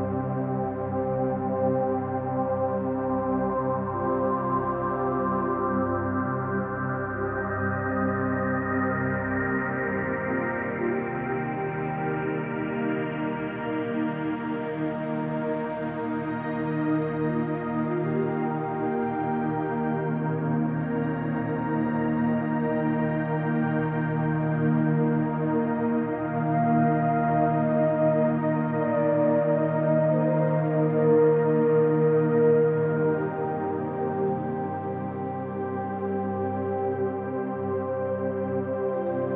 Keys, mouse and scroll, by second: 0.9 click, 2.3 3, 2.8 click, 3.5-5.3 middle drag, 5.9 alt+z, 7.4 shift+click, 8.0 s, 11.0 click, 12.0-12.7 middle drag, 13.5 alt+z, 13.8-14.1 scroll down 1, 14.1-15.5 middle drag, 16.1 middle click, 16.5-16.8 scroll up 2, 17.1-17.9 middle drag, 18.2-18.9 middle drag, 19.7 click, 21.3 s, 23.5 click, 23.9-24.2 scroll down 1, 24.2 middle click, 24.8-25.2 scroll down 1, 25.2-25.7 shift+middle drag, 26.0-26.6 scroll up 2, 26.7 Tab, 27.2-27.9 scroll down 2, 28.2 alt+z, 29.6 alt+z, 29.9-30.3 scroll down 2, 30.3-32.6 scroll up 2, 33.2 click, 34.1-35.2 drag, 35.8-39.3 drag.